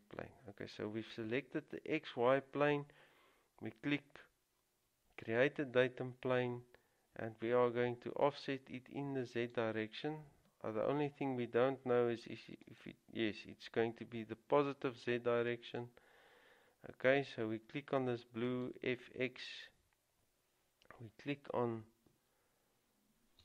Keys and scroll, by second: 22.3 typing.